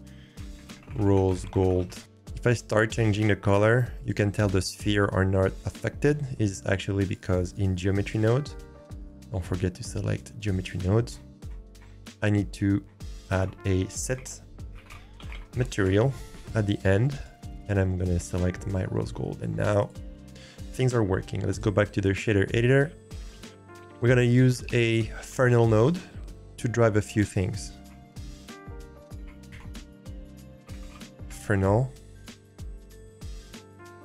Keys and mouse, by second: 2.5 click, 4.0 click, 7.1-10.1 drag, 12.4 middle click, 13.8 shift+a, 18.0 click, 19.8 click, 21.5-22.5 drag, 29.1 shift+a, 33.4-34.0 drag.